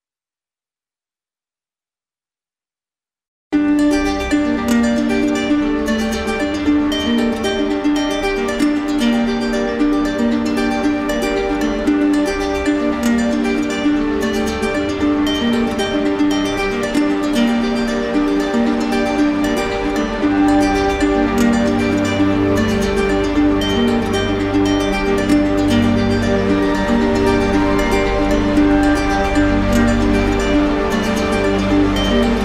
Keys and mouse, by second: 1.5 click, 2.0 click, 5.5 click, 14.7 click, 14.9 ctrl+z, 16.9 right click, 18.9 click, 27.6 click.